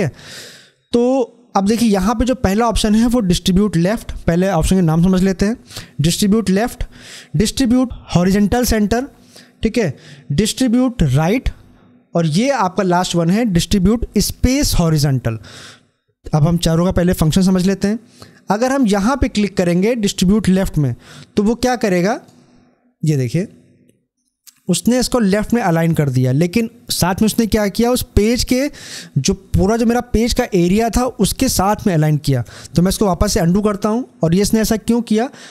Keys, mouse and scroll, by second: 21.9 click, 24.1 scroll down 1, 32.3 ctrl+Num_Lock, 32.3-32.9 scroll down 1, 32.9 ctrl+z.